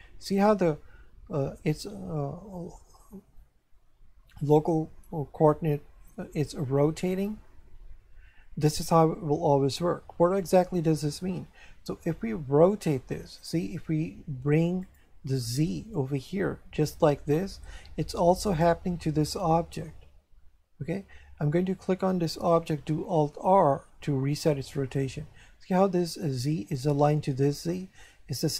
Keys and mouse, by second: 14.8 click, 18.5 right click, 24.0 alt+r.